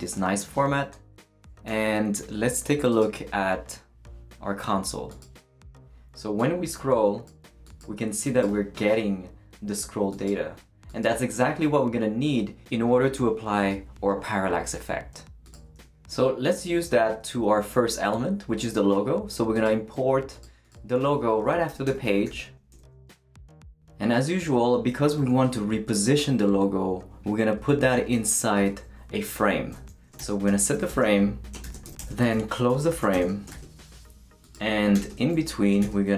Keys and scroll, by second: 1.7 super+s, 15.8 super+w, 22.0-22.9 typing, 23.5 shift+Return, 28.6 Return, 29.9-34.6 typing, 34.9 Return, 35.1 Tab, 35.7 shift+Tab, 35.8 shift+,.